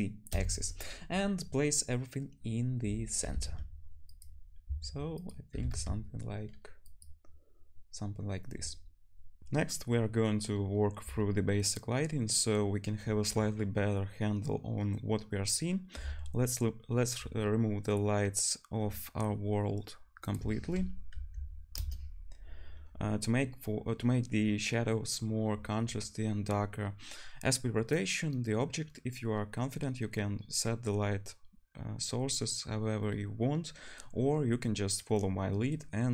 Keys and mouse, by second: 3.2 g, 4.2-9.4 middle drag, 4.6 s, 5.5 g, 9.4 ctrl+shift+F1, 9.4-36.1 drag, 20.3-36.1 middle drag, 20.3-36.1 right drag.